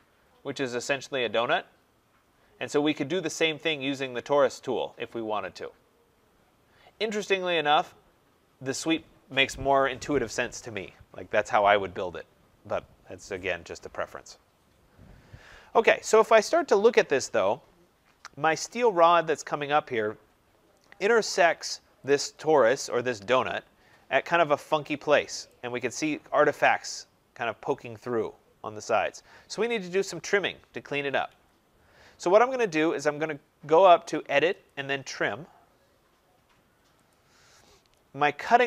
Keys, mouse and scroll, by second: 0.9 click, 15.7 Escape, 15.9 Escape, 16.6 middle click, 16.6 middle click, 17.1 middle click, 17.6 middle click, 17.7 middle click, 18.9 click, 20.4 middle click, 20.8 middle click, 22.0 click, 22.8 scroll, 23.5 scroll, 24.3-24.8 scroll, 24.8 scroll, 25.4 right click, 25.8-27.4 scroll, 29.3 scroll, 29.4 middle click, 31.2 Escape, 31.9 middle click, 34.6 click, 37.1 click.